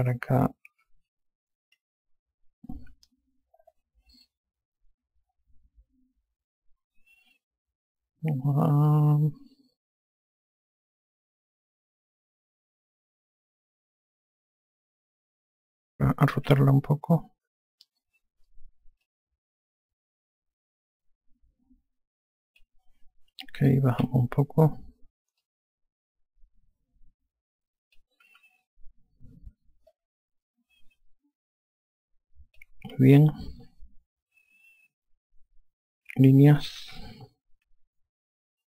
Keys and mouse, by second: 1.6 F3, 2.6 F4, 13.0-13.9 typing, 17.2 r, 19.8 click, 24.7 e, 26.2 click, 29.1 F1, 30.7 click, 34.4 F4, 37.3-38.1 typing.